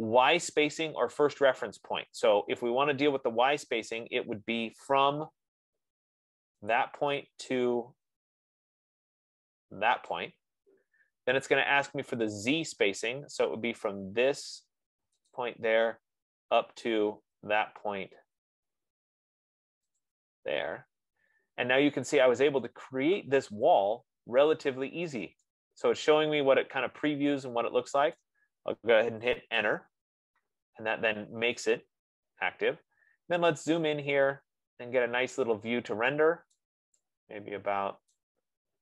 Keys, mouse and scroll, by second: 3.7-4.3 scroll down 4, 4.5-5.3 scroll up 1, 7.5 click, 9.3 scroll, 10.6 click, 11.7 F15, 15.8 click, 16.2-16.9 scroll, 18.0-19.2 scroll, 20.6 click, 21.4-22.2 scroll, 28.5 right click, 29.9 Return, 32.1 click, 33.1 middle click, 33.3 middle click, 33.7 middle click, 36.8 right click, 38.6 right click.